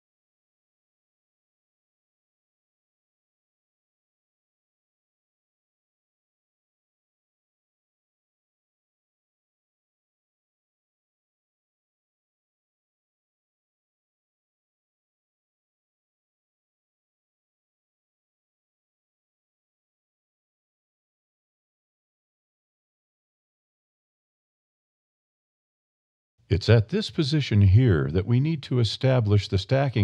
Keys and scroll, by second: 2.3 alt+a, 2.9 a, 3.7 g, 7.4 alt+a, 8.1 g, 11.8 alt+a, 12.4 g, 15.5 alt+a, 16.5 g, 21.1 alt+a, 22.6 g, 25.4 a.